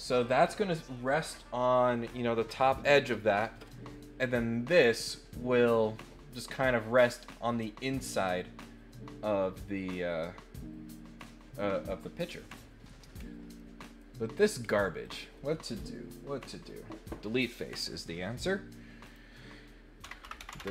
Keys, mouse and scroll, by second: 13.2 scroll down 2, 13.5 middle click, 14.3 scroll up 2, 14.6 scroll down 2, 15.0 click, 19.0 click.